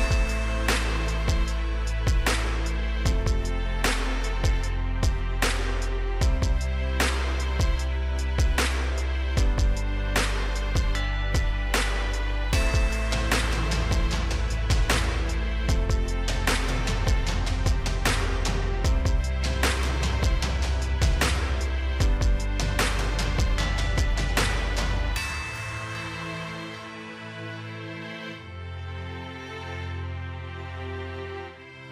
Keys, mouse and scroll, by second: 1.1-2.2 scroll down 1, 2.2 click, 12.7-13.5 scroll down 1, 15.2-15.7 scroll up 1, 17.9 6, 21.2 Return, 22.9 click, 24.7-25.5 scroll up 1, 25.5-26.0 scroll down 1, 26.7 click, 27.4-30.8 middle drag, 31.3 click.